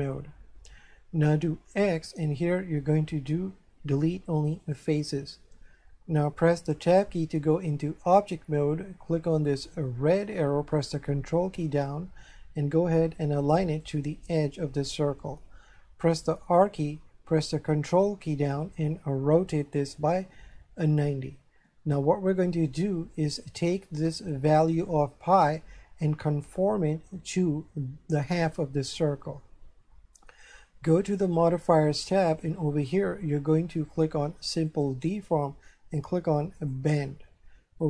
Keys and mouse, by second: 1.9 x, 4.6 click, 7.0 Tab, 9.4 click, 10.7 ctrl+click, 16.5 r, 20.9 ctrl+click, 22.0 shift+middle click, 31.2 click, 34.7 click, 36.6 click.